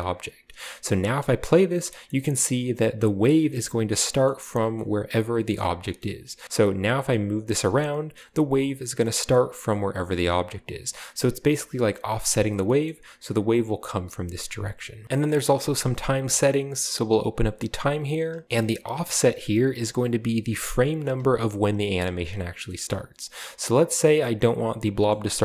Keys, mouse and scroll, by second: 0.0 click, 0.3-0.9 drag, 0.9-1.7 middle drag, 1.0 space, 1.9-2.8 middle drag, 3.2-3.7 right drag, 3.3-3.9 middle drag, 5.7-6.4 shift+scroll down 1, 6.0 shift+middle click, 6.2 g, 6.4 right click, 6.8 g, 7.6 click, 8.3 typing, 8.8 drag, 9.6-12.1 typing, 10.0 click, 10.9 click, 11.8 click, 12.4 click, 13.4 middle click, 14.2 middle click, 14.5 g, 15.1 middle click, 15.7 space, 16.9-17.4 drag, 17.3-17.9 scroll down 1, 18.4 shift+space, 18.9 click, 19.8 click, 21.0 space, 21.7 click.